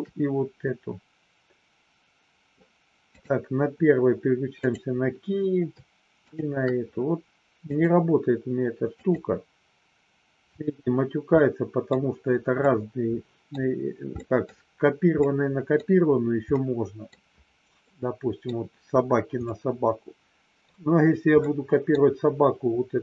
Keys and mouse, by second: 4.6 click, 6.2 shift+click, 7.6-9.1 drag, 11.2 middle click, 12.5-13.5 middle drag, 14.1 middle click, 15.2 middle click, 16.5 middle click, 17.8 middle click, 19.5-20.6 middle drag, 21.4 middle click.